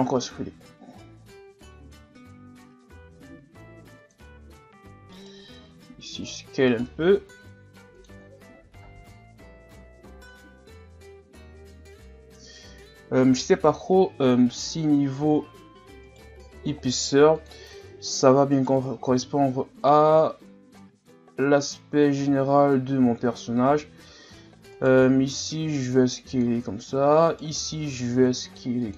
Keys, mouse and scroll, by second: 0.1-3.0 drag, 3.0 s, 5.2 alt+right click, 5.8 s, 6.7 alt+right click, 7.3 s, 8.3 scroll down 1, 8.5 a, 8.9 scroll down 2, 11.1-12.2 scroll up 2, 16.1 alt+right click, 16.7 s, 18.6 alt+right click, 19.1 s, 22.2 a, 22.6-23.5 scroll down 1, 23.5-24.7 scroll up 4, 24.7 alt+right click, 25.3 s, 27.3 alt+right click, 27.8 s.